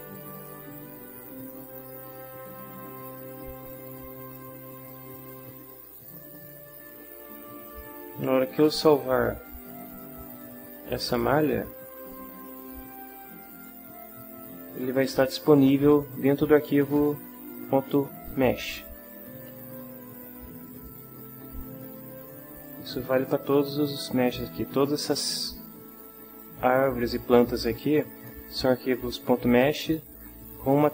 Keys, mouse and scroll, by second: 0.3 click, 1.8 click, 3.0 click, 3.8 click, 5.1 click, 6.1 click, 7.6 click, 10.3 click, 12.6 click, 21.8 click.